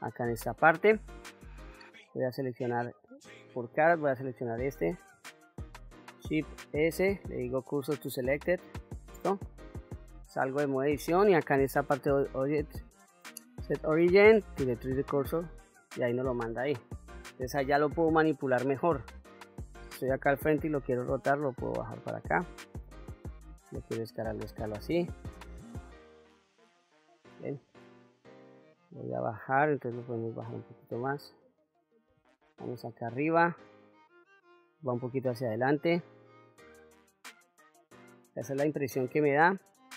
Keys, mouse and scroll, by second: 0.0-0.3 scroll up 2, 0.6 middle click, 2.2 click, 3.5 3, 4.2 click, 6.7 shift+s, 9.4 middle click, 10.6 Tab, 12.1-15.4 drag, 16.7-17.3 middle drag, 17.9-18.8 scroll down 1, 19.4 KP_1, 20.6 r, 22.9 click, 23.7 s, 26.7 click, 27.6 KP_1, 30.0-32.0 drag, 32.5 KP_7, 33.8-34.6 shift+middle drag, 35.1 r, 37.9 click, 38.7 KP_1.